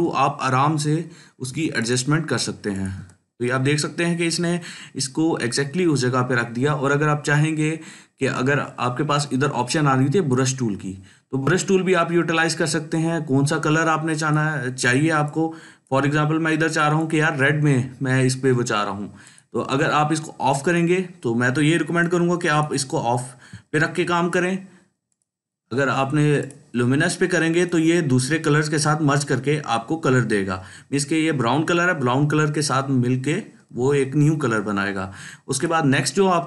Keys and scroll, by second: 23.6 ctrl+z, 34.1 ctrl+z.